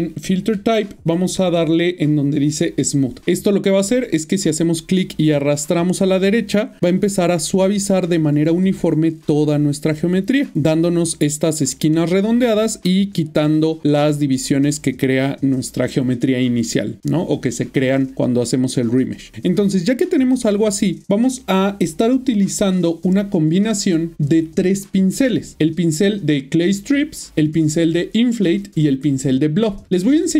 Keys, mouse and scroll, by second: 2.6 click, 8.6 click, 10.8 middle click, 14.1 middle click, 14.6 click, 18.3 middle click, 20.6 shift+middle click.